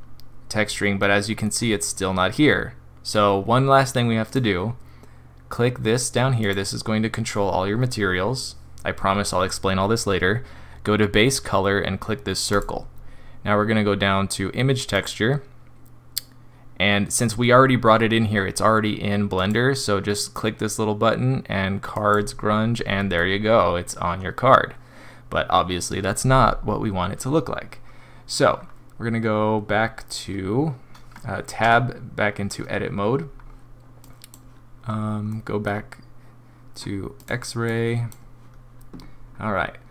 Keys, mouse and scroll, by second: 1.0 middle click, 1.6-2.0 scroll up 3, 4.3 click, 6.4 click, 12.5 click, 19.3 click, 23.2 middle click, 28.5 scroll down 2, 31.6 Tab, 33.3-34.0 scroll down 1, 34.0 click, 35.3 middle click, 37.2 click, 37.6 click, 39.3 scroll up 1.